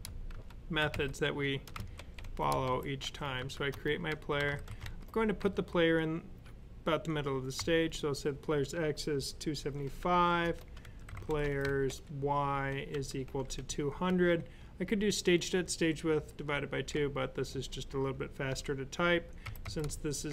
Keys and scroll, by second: 0.0-5.2 typing, 7.2-11.7 typing, 12.7-13.9 typing, 18.1-20.3 typing.